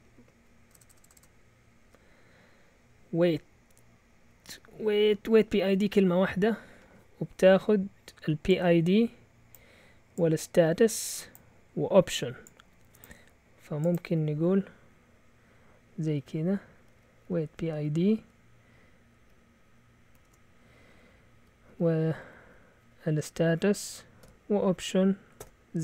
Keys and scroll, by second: 0.0-1.5 typing, 1.8 Return, 3.9 Down, 4.3 Down, 4.5 Down, 4.6-6.1 typing, 16.8-22.7 typing, 24.2-25.8 typing.